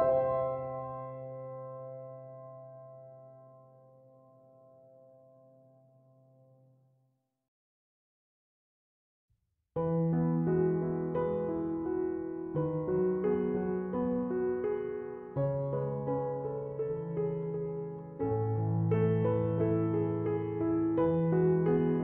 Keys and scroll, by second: 5.0 Escape, 16.8 f.